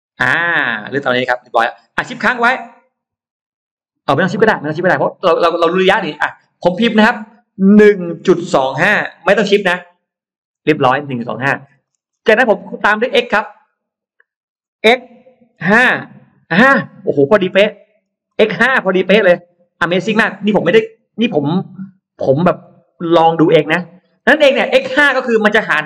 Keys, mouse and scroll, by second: 7.8 1, 8.4 2, 9.3 5, 10.4 Return, 11.2 middle click, 12.2 middle click, 14.8 x, 15.4 5, 15.6 Return, 16.4 Return, 17.6 middle click, 17.6-19.6 scroll up 5, 18.1 middle click, 22.3-22.8 scroll down 2.